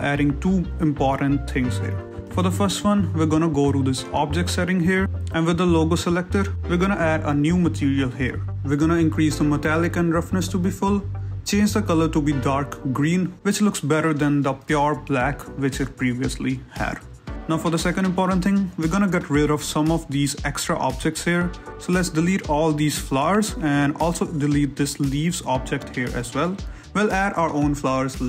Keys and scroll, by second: 0.1 a, 18.2 a.